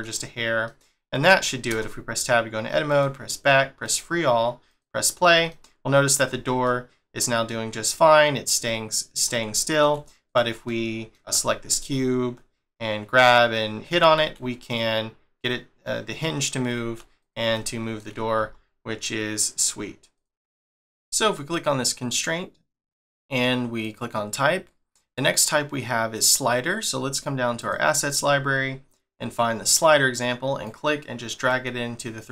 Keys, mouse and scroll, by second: 0.1 scroll down 1, 0.6 middle click, 1.7 Tab, 2.0 scroll down 1, 2.9 click, 3.8 click, 4.7 click, 5.5 middle click, 6.3 scroll down 1, 6.6 middle click, 8.6 middle click, 10.3 click, 10.6 middle click, 11.5 g, 17.5 shift+middle click, 18.4 g, 20.6 shift+middle click, 20.9 click, 21.5 click, 22.1 click, 23.8 click, 27.7 click, 30.6 click.